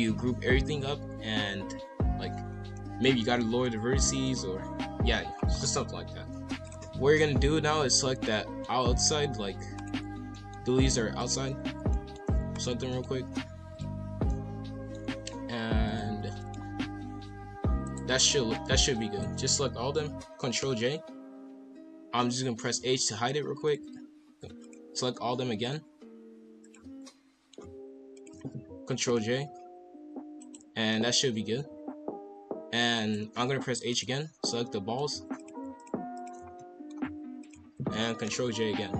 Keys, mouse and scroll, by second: 2.5 scroll down 1, 2.7-3.7 middle drag, 3.7 scroll up 1, 4.0-5.4 middle drag, 5.4 scroll up 4, 6.6 click, 7.2-9.8 middle drag, 9.8 shift+click, 10.3-11.2 middle drag, 11.2 shift+click, 11.9 middle click, 12.5 shift+click, 12.9 middle click, 13.7 shift+click, 14.3-15.8 middle drag, 15.8 shift+click, 16.3 middle click, 16.6 scroll down 1, 16.6 g, 18.1 middle click, 18.5 scroll down 1, 18.7 g, 20.6 ctrl+j, 22.7 h, 23.6 click, 24.6 shift+click, 25.6 shift+click, 26.6 shift+click, 27.0-27.5 middle drag, 27.5 scroll down 1, 28.1 shift+click, 29.0 ctrl+j, 30.0 g, 30.9-31.3 middle drag, 31.3 scroll down 2, 31.5 g, 33.3 h, 33.9 click, 34.6-35.3 middle drag, 35.3 shift+drag, 35.8 shift+click, 36.1 shift+click, 36.6-37.4 middle drag, 37.4 shift+click, 38.2 ctrl+j.